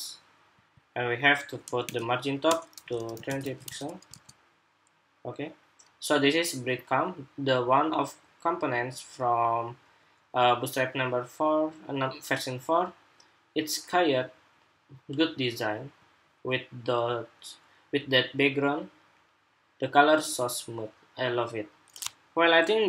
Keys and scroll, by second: 3.2 super+s, 3.4 super+Tab, 3.9 super+r.